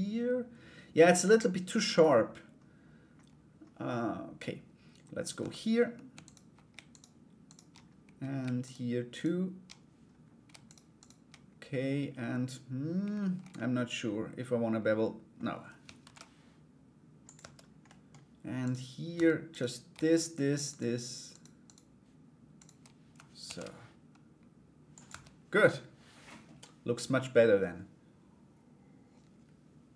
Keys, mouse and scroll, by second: 4.8 right click, 5.0 Tab, 5.8 alt+right click, 6.5 shift+right click, 7.0 shift+right click, 8.2 shift+right click, 8.7 shift+right click, 10.2 shift+right click, 10.5 shift+right click, 13.1-14.9 middle drag, 15.6 ctrl+b, 17.0 Tab, 17.4 middle click, 18.2 right click, 19.1 Tab, 19.1 right click, 19.7 shift+right click, 20.2 shift+right click, 20.9 shift+right click, 21.2 shift+right click, 22.1 shift+right click, 23.0 ctrl+b, 24.7 Tab.